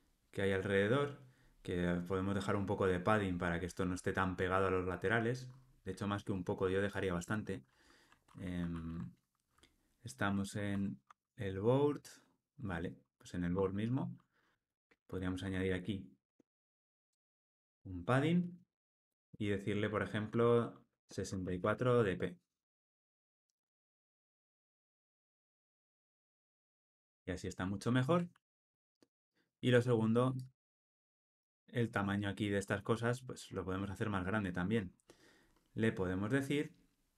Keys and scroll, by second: 8.6 super+p, 11.7 Escape, 17.1 Escape, 19.2 Return, 28.4 alt+super+l, 28.6 ctrl+alt+o.